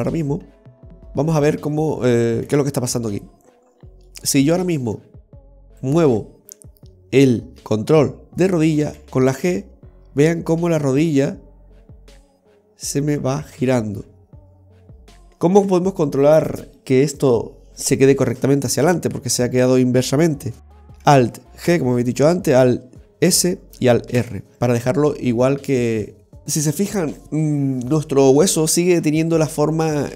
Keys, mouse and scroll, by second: 0.7 KP_Decimal, 1.4-2.6 scroll down 6, 2.6 scroll down 1, 2.6 KP_3, 3.2-3.6 scroll down 2, 3.6 scroll up 2, 4.2 middle click, 4.2-4.6 scroll up 1, 5.3 typing, 5.8 right click, 6.7 middle click, 9.1 g, 15.7 KP_3, 21.8 alt+g, 23.4 alt+s, 24.2 alt+r, 25.8 click.